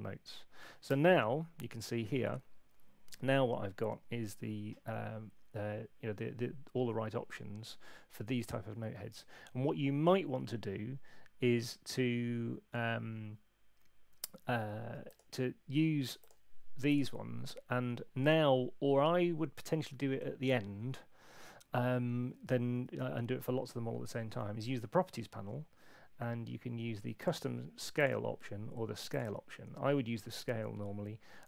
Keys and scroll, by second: 24.3 super+8.